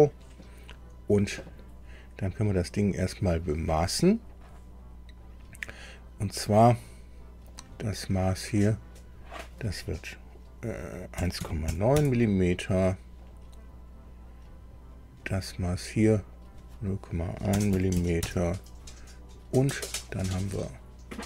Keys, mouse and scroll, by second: 2.2 scroll up 2, 7.5 click, 9.0 click, 11.1 KP_1, 11.4 KP_Decimal, 11.6 KP_9, 11.9 KP_Enter, 14.9 click, 16.3 click, 17.5 KP_0, 17.7 KP_Decimal, 17.9 KP_1, 18.2 KP_Enter.